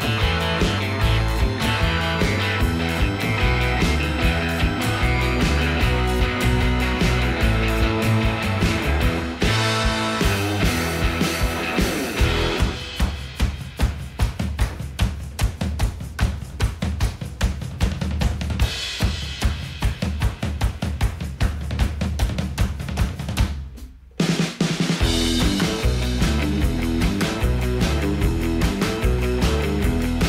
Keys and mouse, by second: 1.9 click, 2.4-2.8 shift+middle drag, 3.6-3.9 middle drag, 8.6 KP_7, 9.7 g, 15.5 click, 15.7-16.3 middle drag, 17.5 ctrl+KP_Add, 18.0 x, 19.0 shift+middle drag, 19.3-20.0 middle drag, 22.3 click, 24.1 click, 25.5-26.9 middle drag, 27.8-28.6 middle drag, 29.1 shift+middle drag.